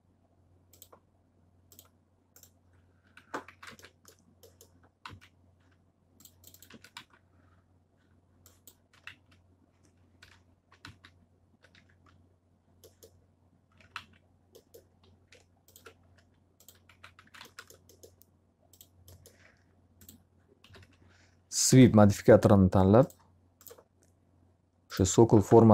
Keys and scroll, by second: 2.8 x, 3.5 z, 3.6 alt+a, 5.0 z, 6.7 alt+a, 7.0 z, 8.6-11.7 typing, 13.5-14.4 typing, 16.0 d, 16.8 x, 17.2 z, 17.4 alt+a, 20.4-21.3 typing, 21.7 Return, 25.4-25.7 typing.